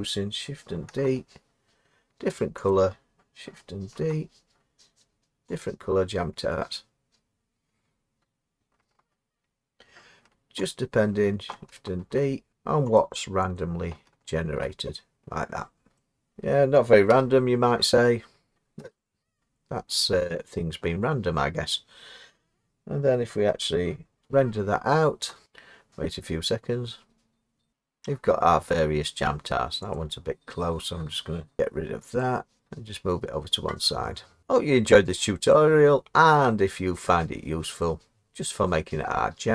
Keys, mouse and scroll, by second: 0.9 d, 2.7 click, 3.9 d, 5.7 click, 10.7 click, 12.0 d, 12.5 click, 13.0 click, 13.6 click, 14.4 d, 14.5-16.3 drag, 16.3 middle click, 17.1 0, 18.8 0, 19.7 scroll down 2, 20.3-20.9 scroll down 1, 20.9-21.7 scroll down 5, 23.9-24.5 scroll down 1, 24.2 F12, 24.6-25.4 scroll, 28.9-29.9 scroll down 3, 29.9 click, 31.6 Escape, 32.2 click, 34.9 middle click, 36.6-37.1 scroll, 37.1 middle click.